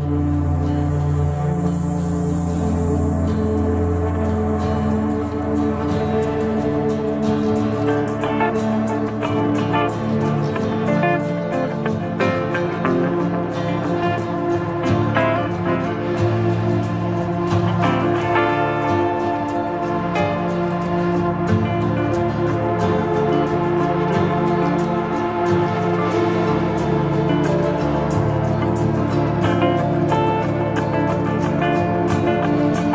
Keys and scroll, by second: 31.8 shift+F2, 32.8 F3.